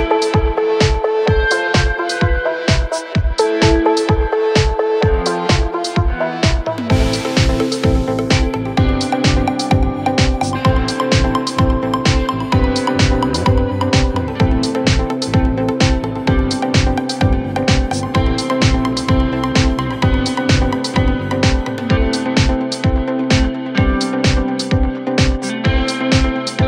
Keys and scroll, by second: 8.7 ctrl+z, 9.2 shift+Page_Up, 10.2 c, 10.8 Escape.